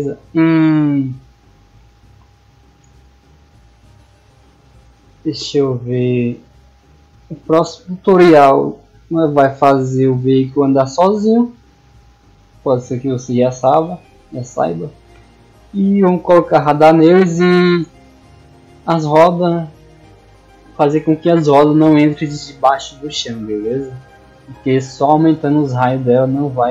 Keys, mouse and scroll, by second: 0.1 click, 1.5 middle click, 23.3 click, 24.1 click, 24.6 click, 24.9 click, 25.3 click, 25.6 click, 25.9 drag, 26.2 drag, 26.5 click.